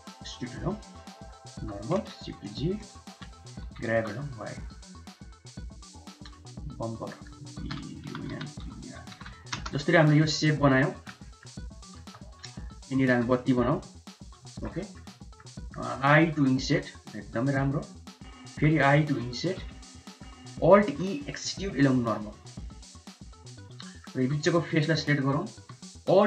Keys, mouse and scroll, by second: 0.4 click, 0.5-1.3 middle drag, 1.6 1, 2.2 shift+z, 2.7 click, 3.0 shift+z, 3.7 g, 4.7 Tab, 5.5 Tab, 6.8-9.7 drag, 9.8 middle drag, 10.6 middle click, 11.3 middle click, 11.8 click, 12.0 Tab, 12.8 click, 13.1 3, 13.8 shift+click, 14.5 middle click, 14.8 shift+middle click, 15.2 middle click, 15.6 shift+middle click, 16.4 i, 18.6 i, 20.1 click, 20.9 alt+e, 23.8 click, 24.2 3, 25.2 alt+click.